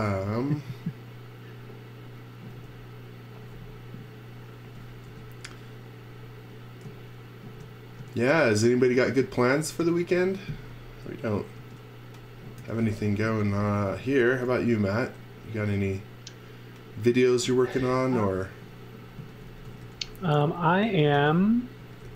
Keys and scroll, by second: 0.0-0.1 typing, 2.5 space, 5.1 l, 11.5-14.5 typing, 18.9-22.1 typing.